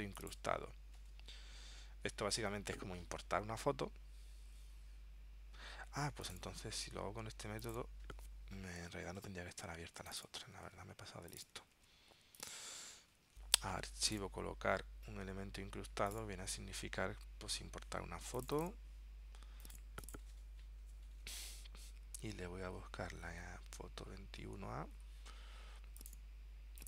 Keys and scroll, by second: 9.6 super+w, 10.8 super+w, 13.0 super+w.